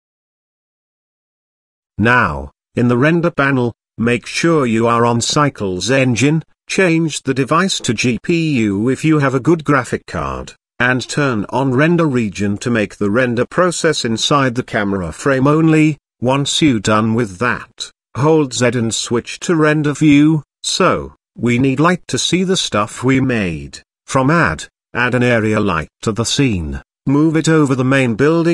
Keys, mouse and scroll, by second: 0.0 click, 1.0 click, 1.9 click, 3.7 click, 4.9-6.0 drag, 6.9-11.5 drag, 12.1 click, 13.1 click, 16.5 click, 17.7 z, 24.2 shift+a, 27.8 g, 28.1 z.